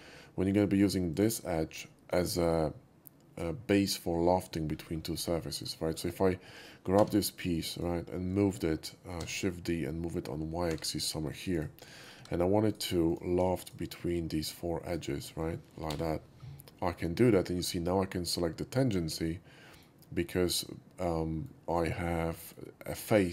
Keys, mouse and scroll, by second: 0.4 shift+click, 0.4 shift+x, 1.1 click, 1.4 shift+middle click, 1.6 shift+middle click, 4.7 middle click, 4.9 middle click, 5.1-5.6 middle drag, 5.7 shift+middle click, 6.9 4, 7.1 click, 7.7 click, 9.1 shift+d, 10.6 y, 11.2 click, 11.5 right click, 11.8 middle click, 12.1 2, 12.6 right click, 13.0 click, 14.4 shift+click, 14.8 shift+click, 15.8 l, 16.5-17.2 middle drag, 17.7 scroll up 1, 19.2-19.7 middle drag, 20.5-21.4 middle drag, 22.3 middle drag.